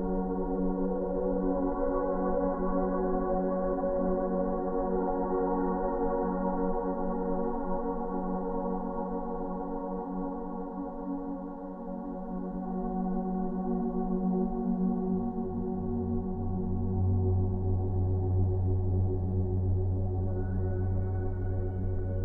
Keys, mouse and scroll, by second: 0.0 ctrl+b, 1.5-3.0 drag, 7.8 scroll up 1, 10.1 scroll up 1, 10.1 click, 15.1 space, 15.4 click, 15.6-16.0 space, 16.7 click, 18.8 space, 19.0 right click, 19.2 click.